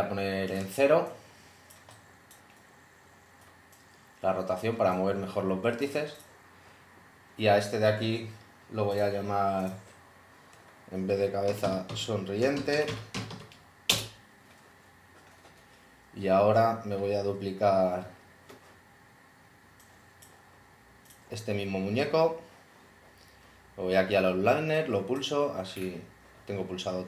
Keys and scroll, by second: 11.3-14.8 typing, 13.9 Return.